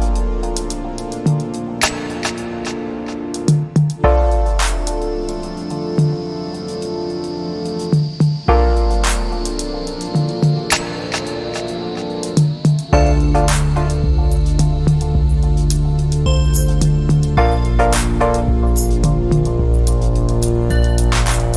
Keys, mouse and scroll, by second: 1.6 click, 4.1 click, 5.1 click, 5.9 0, 6.5-6.9 scroll down 1, 7.0-7.3 scroll up 2, 8.2 click, 9.1 click, 9.8-10.8 typing, 12.7 click, 14.3 1, 15.8 5, 16.1 0, 19.3 0, 20.9 click.